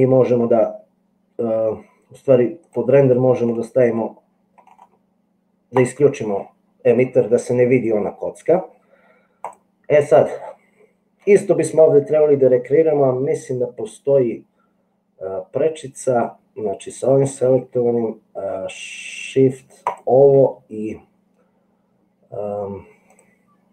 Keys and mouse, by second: 19.8 shift+middle click, 23.5-23.7 drag.